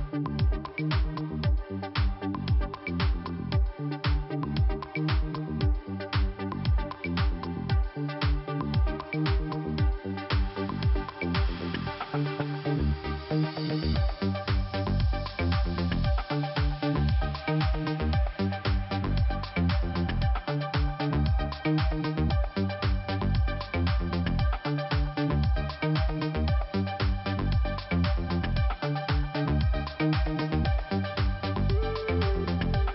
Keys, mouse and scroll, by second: 3.1 scroll up 1, 4.9 click, 5.0 click, 5.4 click, 5.5 double click, 6.0 double click, 6.3 double click, 7.1 scroll up 1, 7.3 right click, 8.1 click, 8.2 click, 9.3 click, 9.4 click, 9.9 click, 10.1 click, 10.5 scroll down 2, 11.3-12.5 scroll up 2, 12.9 click, 13.4 click, 14.2 right click, 16.2 click, 18.1 click, 18.4 right click, 19.1 right click, 19.7 click, 20.7 click, 21.3 click, 22.1 right click, 22.8 click, 23.5 scroll down 2, 25.7 click, 27.1 click, 27.3 click, 27.3 click, 27.5 double click, 29.6 click, 29.7 click, 31.8-32.1 scroll up 2.